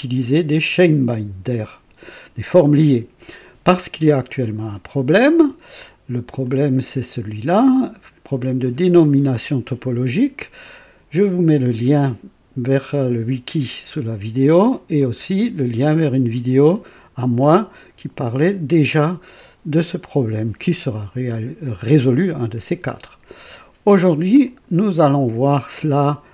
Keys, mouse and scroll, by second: 4.4 click, 6.4 click, 15.0 click, 24.4 click, 25.7-26.3 drag.